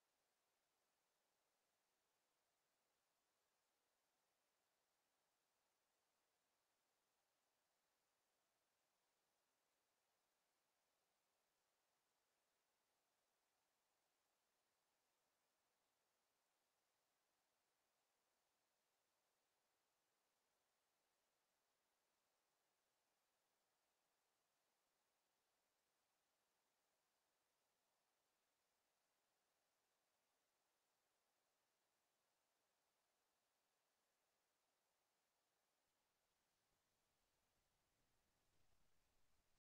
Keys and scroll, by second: 11.9 Escape.